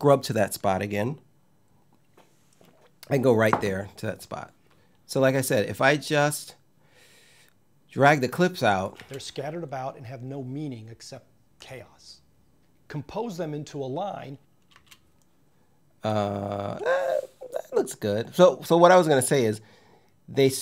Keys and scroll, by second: 8.6 space, 14.4 space.